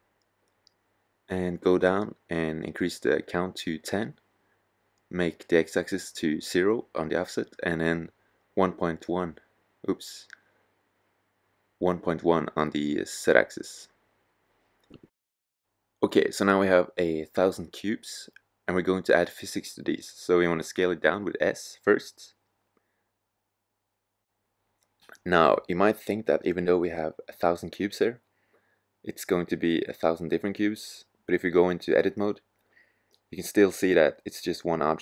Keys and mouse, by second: 4.3-6.2 drag, 7.2-11.4 drag, 17.8 s, 24.7-26.5 drag, 29.7-30.8 middle drag, 30.9-31.2 drag, 31.7 click, 32.6-33.7 middle drag, 34.2-35.0 drag.